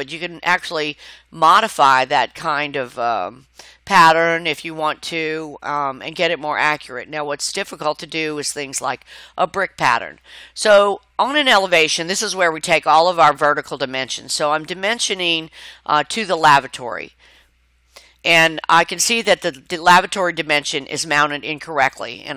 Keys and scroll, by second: 12.0 Escape.